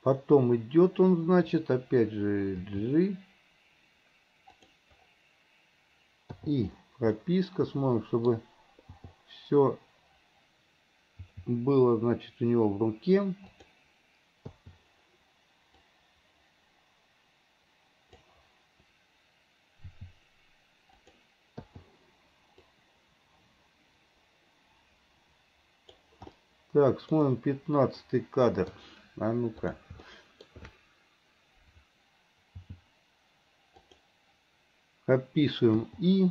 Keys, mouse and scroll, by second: 2.7 g, 6.4 i, 7.3-9.1 middle drag, 9.1 i, 11.3 g, 14.6 i, 15.9-18.4 drag, 19.9 g, 21.7 i, 22.8-26.2 drag, 26.4-29.8 middle drag, 29.8 click, 30.2 shift+middle click.